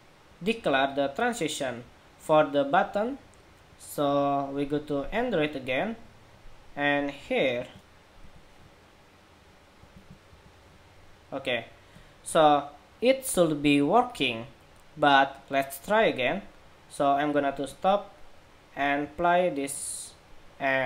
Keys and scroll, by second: 7.3 super+v, 9.7 super+v, 10.5 super+v.